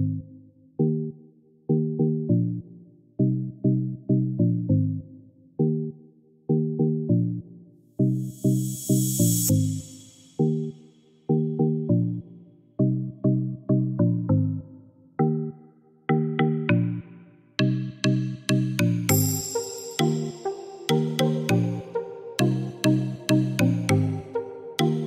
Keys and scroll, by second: 0.0-0.4 typing, 2.4 Return.